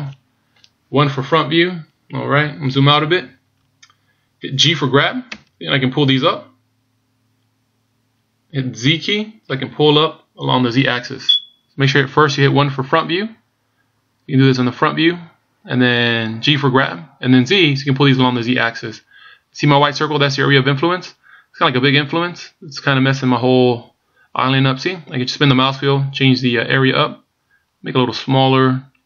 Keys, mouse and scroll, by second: 1.3 KP_1, 2.8-4.6 scroll down 1, 5.7 g.